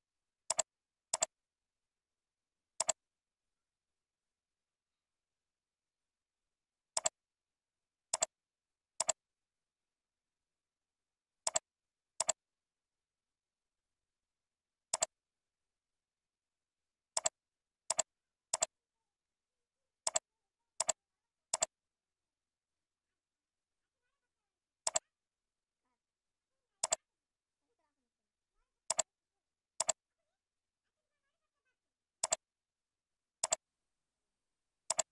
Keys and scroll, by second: 4.2 ctrl+Down, 4.8 ctrl+Up, 5.6 ctrl+Down, 21.4 ctrl+c, 21.8 ctrl+v, 22.8 ctrl+e, 29.6 ctrl+c, 30.2 ctrl+v, 34.6 ctrl+c.